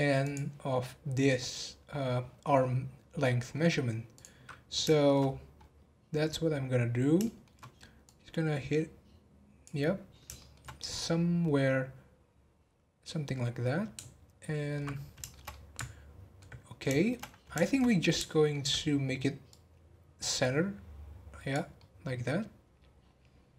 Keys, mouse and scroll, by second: 0.2 click, 0.6 scroll up 1, 1.9-2.5 scroll down 9, 3.1-3.9 scroll up 13, 4.1 click, 4.9 shift+middle click, 5.2 scroll down 2, 5.6-6.6 scroll up 2, 7.2 shift+middle click, 8.0 click, 9.8 scroll down 1, 10.3 scroll down 6, 10.4-13.8 shift+middle drag, 14.9 scroll down 2, 15.2-16.6 shift+middle drag, 16.6 scroll down 1, 16.9 shift+middle click, 17.2-17.6 scroll up 1, 17.6-19.5 shift+middle drag, 19.5 click, 21.7-23.5 middle drag.